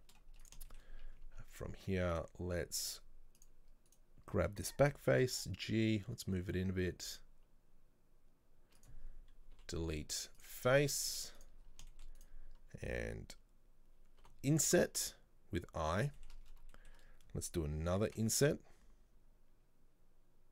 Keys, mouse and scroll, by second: 0.8-2.2 shift+middle drag, 2.2 click, 3.0 z, 4.0 right click, 5.3 g, 10.7 middle click, 11.2 z, 11.7 scroll down 3, 12.0 shift+middle click, 12.3 right click, 14.3 |, 16.3 shift+middle click, 16.5 scroll up 2, 16.8-18.1 shift+middle drag.